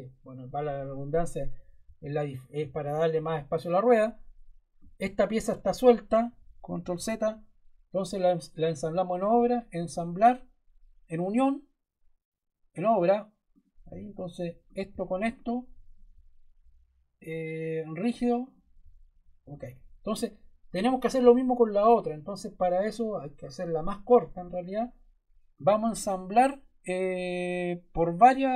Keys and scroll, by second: 6.7 super+Caps_Lock, 6.8 super+z.